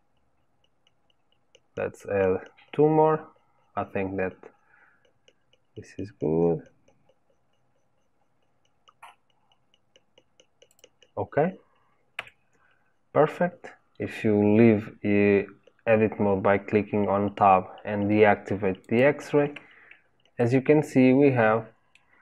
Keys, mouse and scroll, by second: 12.1 Tab, 18.8 click, 19.6-20.3 scroll down 1, 20.3-22.2 middle drag.